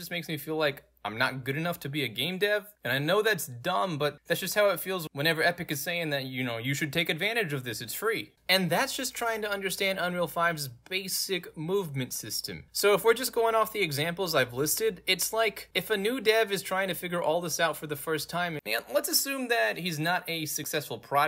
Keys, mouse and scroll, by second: 0.6 w, 2.3 w, 3.5-8.1 typing, 10.1 space, 11.3 space, 12.1 space, 12.7 s, 14.5-16.7 typing, 17.9 w, 18.2 space, 18.6 s, 19.0 w, 20.3 w, 21.0 w.